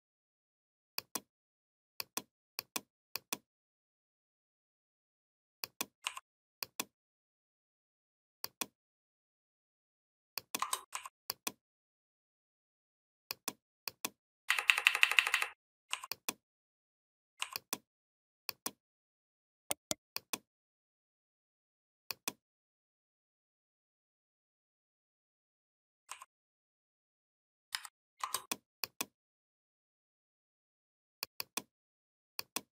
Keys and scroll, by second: 14.3 Up, 27.5 a.